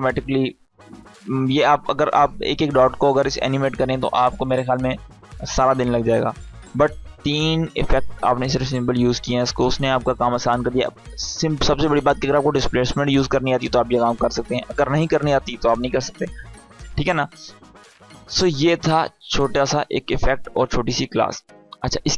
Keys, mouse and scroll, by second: 17.3-20.9 drag.